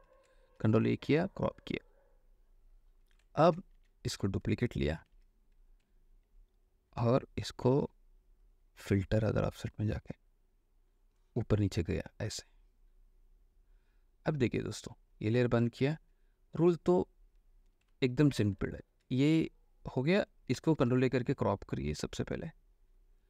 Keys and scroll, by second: 0.7 ctrl+a, 3.6 ctrl+d, 3.8 v, 5.2 ctrl+j, 18.0 alt+space, 18.8 ctrl+alt+space, 20.7 ctrl+alt+space, 20.9 ctrl+alt+a.